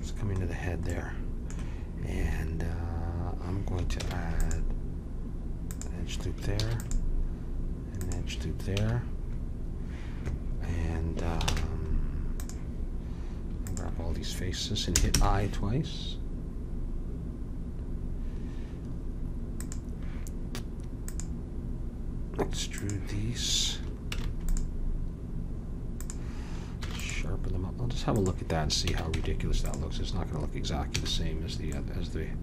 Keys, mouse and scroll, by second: 4.0 ctrl+r, 6.5 ctrl+r, 8.7 a, 11.4 ctrl+Tab, 13.6-15.6 drag, 21.1-22.9 drag, 24.1 ctrl+r, 26.8 ctrl+r, 28.8 a, 29.1 Tab, 31.0 a.